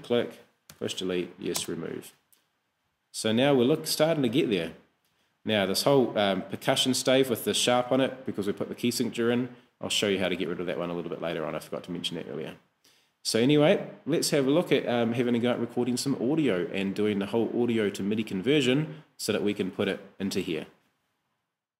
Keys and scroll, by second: 0.7 BackSpace, 1.6 Return.